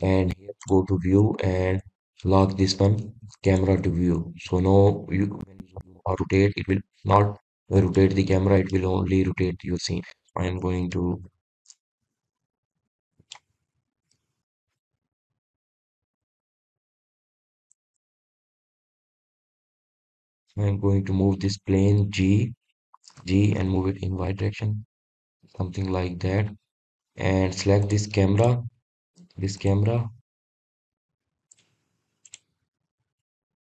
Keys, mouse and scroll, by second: 0.9 click, 3.5 click, 6.4-8.0 drag, 8.5-8.9 scroll down 3, 9.7 click, 12.1 click, 18.8 scroll down 1, 19.5-19.8 scroll down 1, 20.5-22.9 middle drag, 22.9 KP_0, 25.2 n, 30.2 click, 32.0-32.3 scroll down 3, 32.5-33.0 scroll up 5, 33.0-33.6 scroll down 7.